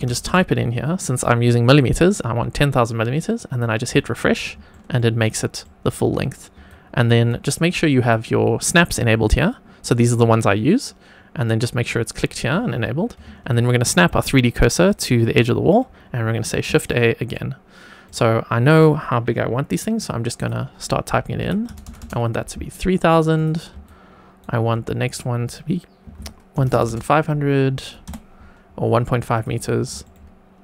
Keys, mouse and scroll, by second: 0.0 KP_0, 0.2 KP_0, 3.9 click, 4.6 shift+middle drag, 5.5 shift+middle click, 6.6 shift+right click, 7.9-12.2 drag, 13.5-15.3 shift+right drag, 16.6 shift+a, 17.2-18.0 shift+middle drag, 20.3-23.0 drag, 21.8 KP_0, 21.9 KP_0, 23.3 click, 23.8 shift+right click, 25.0-29.3 drag, 26.7 KP_0, 26.8 KP_0, 29.4 click, 29.9 shift+middle click.